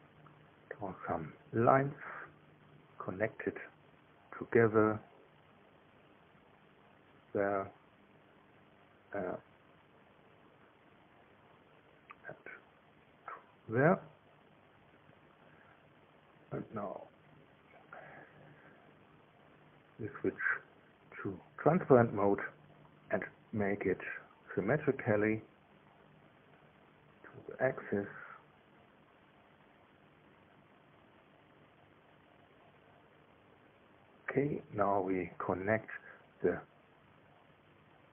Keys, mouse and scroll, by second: 2.4 click, 7.7 click, 11.8 click, 15.2 click, 15.9 click, 19.9 click, 21.1 click, 21.8 middle click, 24.2 click, 25.0-26.2 drag, 27.3 click, 28.7 click, 29.6 click, 32.0 click, 34.0 click.